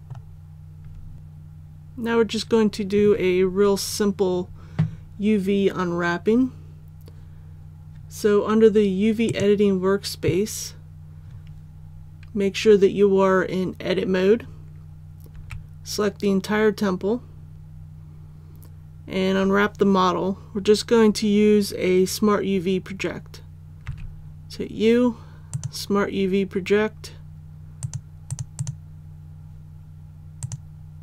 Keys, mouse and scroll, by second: 1.1-9.3 scroll down 1, 9.3 click, 15.3 a, 23.9 u, 25.5 click.